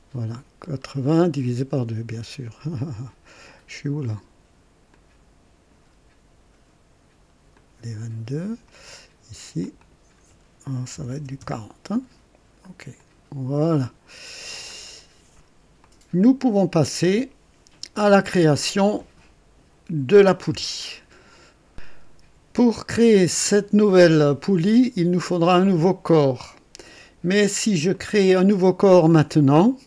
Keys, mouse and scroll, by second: 0.6-1.1 scroll down 1, 4.9-5.9 drag, 7.5-8.8 drag, 9.6 click, 10.9 KP_4, 11.1 KP_0, 11.4 KP_Enter, 12.9 click, 14.1 click, 14.1 scroll up 1, 14.5-14.8 scroll down 1, 15.8-17.1 drag, 18.8-19.8 right drag, 19.6 typing, 22.9-23.8 typing, 24.4-25.2 right drag, 27.9 click, 28.9-29.8 drag.